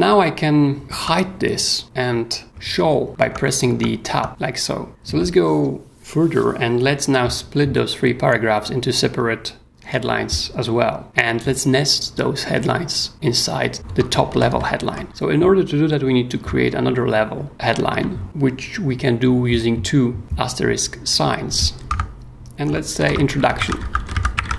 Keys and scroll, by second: 0.9 Tab, 2.4 Tab, 4.7 Tab, 4.9 o, 13.8 Escape, 14.3-15.5 typing, 17.9 shift+8, 21.9-24.5 typing.